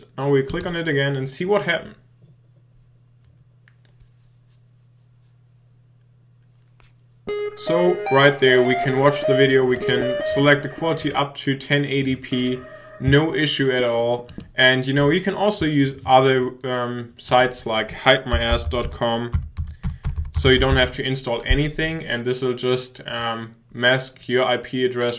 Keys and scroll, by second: 19.9-21.2 typing.